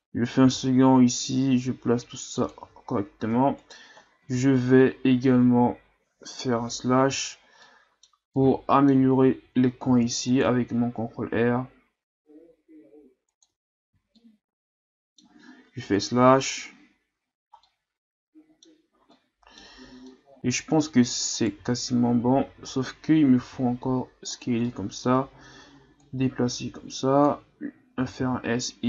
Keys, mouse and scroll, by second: 0.4 g, 2.6 z, 2.9 scroll down 3, 3.2 Tab, 3.6 right click, 4.0 scroll up 2, 4.2 Tab, 6.3 KP_Divide, 7.3-7.6 scroll up 4, 7.6-9.9 middle drag, 9.9 ctrl+r, 13.5 Tab, 13.9 a, 14.1-15.8 middle drag, 15.8 KP_Divide, 17.1-17.7 scroll down 2, 17.7-20.8 middle drag, 20.8-21.4 scroll up 1, 21.4 right click, 21.6 Tab, 22.2 a, 22.5 a, 23.4 s, 24.7 middle click, 25.2-25.8 scroll up 2, 26.0-28.0 drag, 28.0 s.